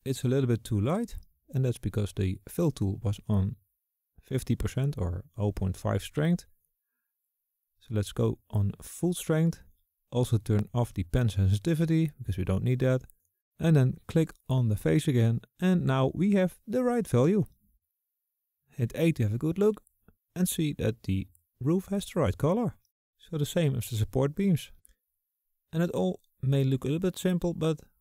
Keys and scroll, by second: 18.4 a, 19.7 a.